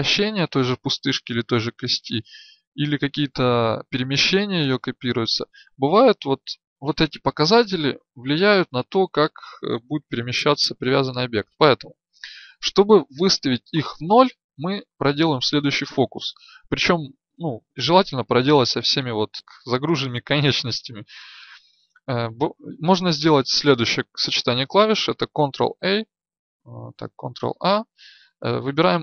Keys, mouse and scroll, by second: 25.4 ctrl+a, 27.0 ctrl+a.